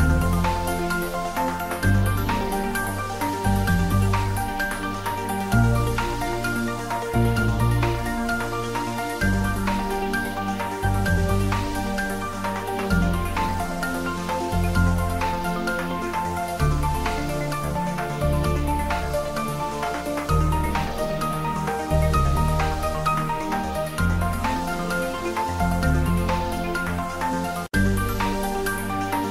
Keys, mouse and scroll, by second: 1.3 shift+Left, 3.4 shift+click, 4.1 shift+Tab, 6.6 Tab, 7.3 click, 7.9-8.8 typing, 10.3 click, 10.9 ctrl+s, 11.1 Tab, 11.4 click, 11.7 ctrl+s, 12.2-13.8 middle drag, 14.3 click, 15.0 ctrl+s, 15.3 ctrl+middle click, 16.4 click, 17.3 Tab, 18.0-21.0 typing, 18.4 click, 20.1 click, 23.0-23.9 typing, 23.0 click, 24.2 click, 24.8 Tab, 25.3-25.8 ctrl+middle drag, 25.6-26.4 typing, 26.7-27.2 ctrl+middle drag, 27.2 ctrl+s, 29.0 ctrl+s.